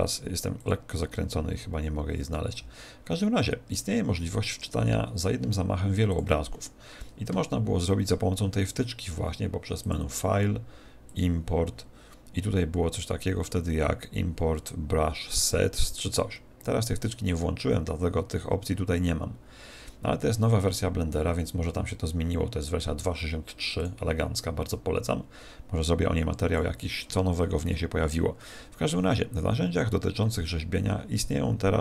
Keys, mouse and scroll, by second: 9.8 click, 23.8 click, 29.4-31.2 scroll down 11.